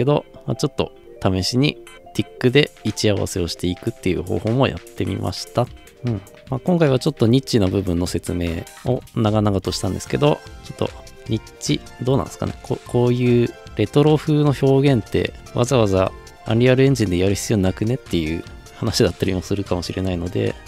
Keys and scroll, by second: 11.7 f.